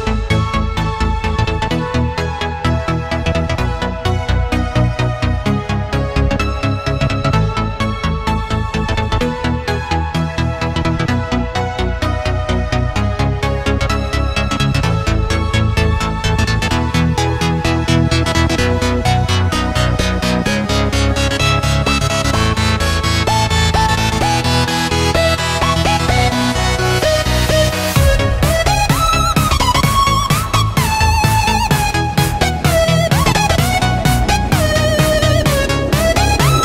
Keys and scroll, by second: 0.7 super+z, 1.6 a, 6.3-10.1 typing, 20.4 a, 29.0-31.3 typing, 33.8 shift+super+[, 34.1 super+], 35.4-36.4 typing.